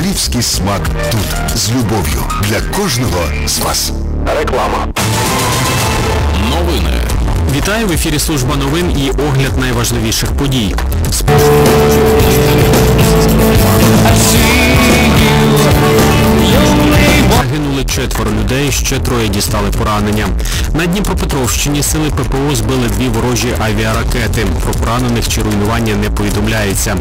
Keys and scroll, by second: 1.8 g, 2.0-3.2 Up, 4.3 Up, 4.4 Up, 4.4 Return, 17.9 Page_Down.